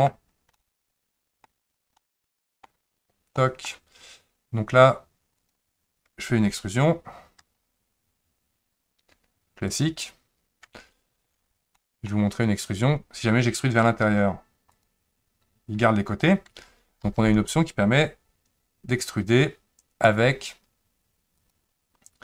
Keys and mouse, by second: 0.5 middle click, 2.0 middle click, 3.4 middle click, 7.4 e, 11.1 ctrl+z, 11.7 middle click, 14.1 e, 17.1 ctrl+z, 21.5-22.2 drag.